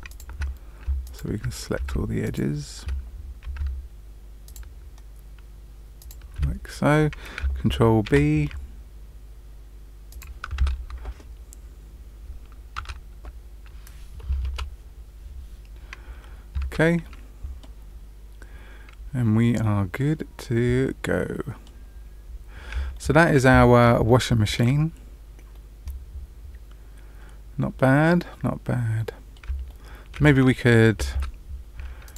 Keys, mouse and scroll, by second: 0.0 alt+click, 1.0 alt+click, 2.2 alt+shift+click, 4.4 alt+shift+click, 5.9 alt+shift+click, 8.0 ctrl+b, 10.5 Tab, 12.7 Tab, 14.4 Return, 15.6-16.5 scroll down 3, 16.5 Tab, 17.0 middle click, 17.8-18.4 scroll down 1, 18.4 scroll down 1, 18.9 scroll down 1, 19.6 middle click, 21.8-22.5 scroll down 2, 22.9 shift+middle click, 23.3 scroll down 1, 23.4 middle click, 24.0 middle click, 25.5 middle click, 29.6 shift+middle click, 30.3 middle click, 31.1 Tab, 32.0 click.